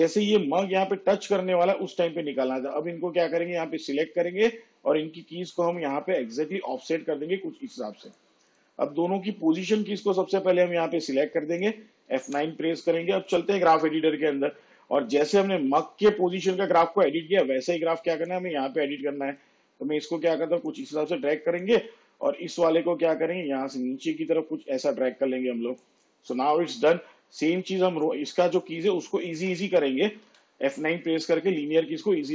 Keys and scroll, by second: 12.2 F9, 30.3 F9.